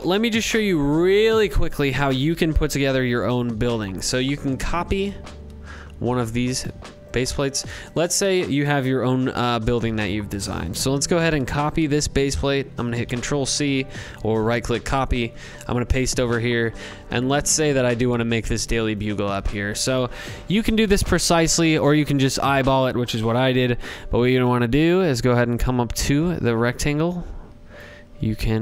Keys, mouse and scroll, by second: 5.1 click, 5.5 click, 6.1 click, 6.9-9.3 drag, 11.9 ctrl+c, 14.0 ctrl+v, 14.7 scroll, 16.5 click, 17.9 click, 23.0 click, 24.1-28.6 drag.